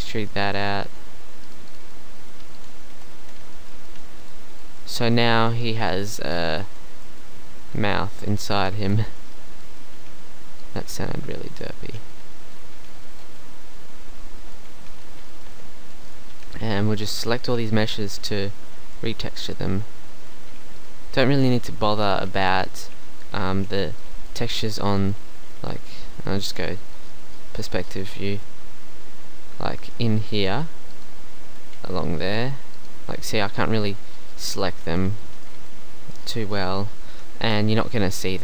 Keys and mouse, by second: 0.3 click, 1.0 z, 3.0 KP_1, 3.2 z, 3.9 e, 4.4 z, 4.9 Tab, 5.8 middle click, 8.8 Tab, 10.0 b, 11.9 b, 12.8 b, 14.8 b, 16.3 b, 17.5 b, 19.1 b, 20.5 b, 21.9 b, 22.8 b, 23.5 b, 26.5 KP_5, 30.4-34.2 middle drag, 37.5 KP_5.